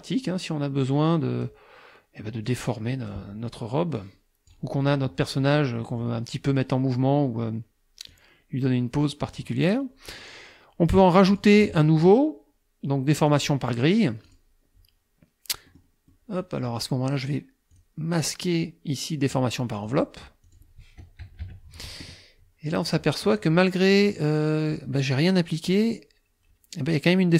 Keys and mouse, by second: 2.5 click, 4.0 click, 4.9 middle click, 5.8 middle click, 8.1-9.6 drag, 11.3 click, 13.3 click, 14.3 click, 15.7 middle click, 16.1 middle click, 17.7 click, 19.9 click, 20.5 click, 21.3 KP_Subtract, 22.9 click, 23.4 click, 23.9 click, 25.7 click.